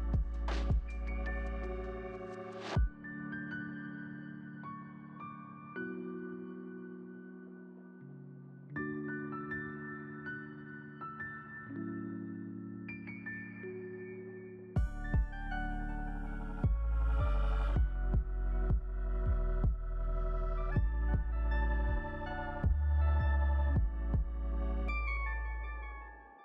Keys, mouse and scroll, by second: 1.1 double click, 2.2-3.7 scroll down 5, 3.7-10.6 scroll down 4, 10.6 double click, 11.6 1, 11.8 Return.